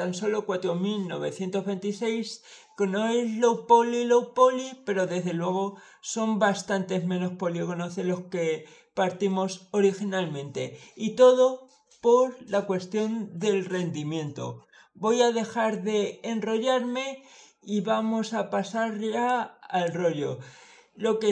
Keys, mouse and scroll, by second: 19.1 click.